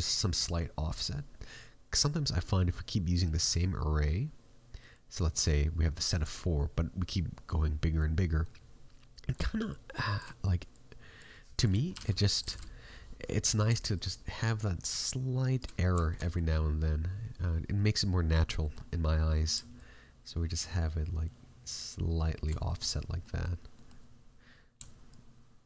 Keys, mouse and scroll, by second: 7.6-9.3 scroll down 2, 7.9 middle click, 9.6 shift+click, 10.6 click, 13.9 shift+click, 14.3 shift+click, 15.7 scroll up 6, 15.9 shift+middle click, 16.1 middle click, 17.3-17.7 scroll down 1, 17.7 middle click, 19.7 shift+click, 22.6 middle click, 22.8-23.3 scroll down 2, 23.1 middle click, 25.0 shift+click.